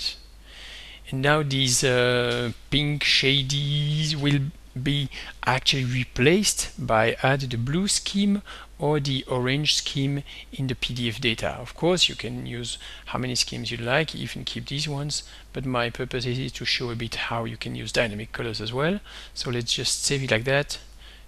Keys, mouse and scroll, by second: 0.1 click, 8.3 click, 10.6 click, 16.9-18.0 drag, 20.0 click.